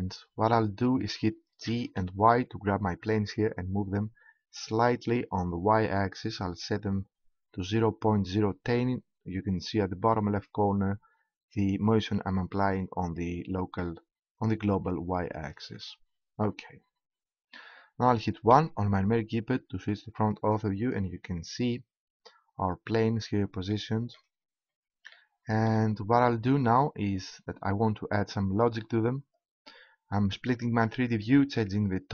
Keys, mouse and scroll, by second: 1.7 g, 15.6-17.4 drag, 18.5 KP_1, 29.4 click, 30.1 right click, 30.4 click.